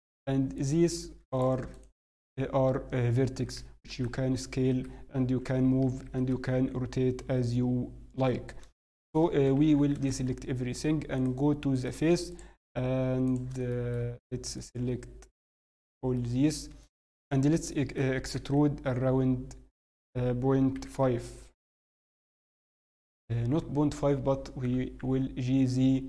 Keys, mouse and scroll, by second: 0.5 click, 3.3 s, 5.4 g, 6.5 r, 8.6 a, 8.6-9.4 scroll down 1, 9.4 ctrl+KP_7, 9.9 alt+a, 9.9 scroll down 3, 10.2-10.8 scroll up 1, 11.1 click, 11.1-11.7 scroll up 2, 13.2 click, 13.7 shift+middle click, 14.5 shift+click, 15.7 shift+click, 15.8-16.2 scroll down 4, 16.1 middle click, 16.9-17.4 scroll up 1, 17.4 shift+scroll down 1, 17.6 shift+middle click, 18.3 e, 24.6 g.